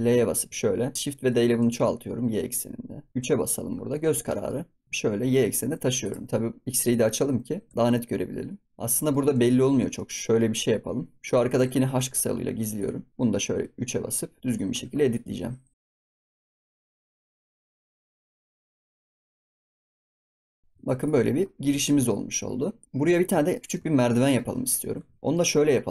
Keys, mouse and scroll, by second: 0.9 middle click, 1.2 shift+d, 3.7-4.3 scroll up 5, 4.3 shift+middle click, 4.8 scroll up 1, 6.8 click, 7.1-7.4 scroll up 2, 7.4 g, 8.8-9.4 middle drag, 9.4 click, 9.9-11.2 middle drag, 11.2 click, 11.9 h, 12.2 scroll up 5, 12.7 click, 13.4 KP_3, 14.2 scroll up 2, 14.4 click, 14.7 Tab, 15.0 click, 15.8 l, 15.9 scroll up 1, 16.0 shift+middle click, 16.5 g, 16.9 g, 17.1 right click, 17.4-17.8 scroll down 2, 17.5 ctrl+s, 17.6 shift+middle click, 17.7 ctrl+s, 17.8 shift+middle click, 17.9 Tab, 18.0 Tab, 18.1 shift+middle click, 18.3 ctrl+s, 18.3 shift+middle click, 18.6 shift+d, 19.6 scroll up 3, 19.6 shift+middle click, 19.8 shift+middle click, 20.0 g, 20.5 Tab, 20.5 scroll down 11, 20.7 ctrl+s, 21.0 click, 21.2-21.5 middle drag, 21.5-21.8 scroll up 2, 21.8 shift+middle click, 22.7 click, 22.8 middle click, 23.0 ctrl+s, 23.2 scroll down 1, 23.4-23.8 shift+middle drag, 23.8 ctrl+s, 23.9 scroll down 1, 24.2 middle drag, 24.4 scroll up 2, 24.9 ctrl+s, 25.2 middle drag, 25.4 scroll up 2, 25.8 scroll down 3.